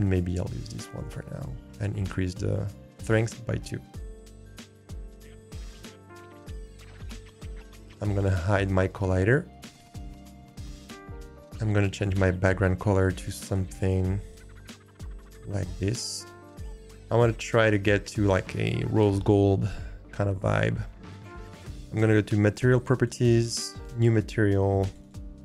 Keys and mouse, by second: 1.8-2.8 drag, 6.2 click, 11.9 click, 23.8 click, 24.8-25.4 drag.